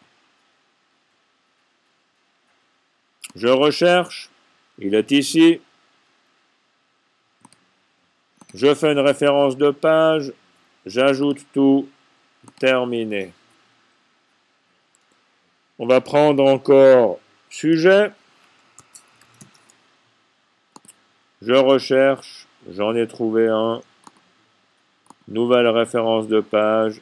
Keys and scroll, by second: 19.3 typing.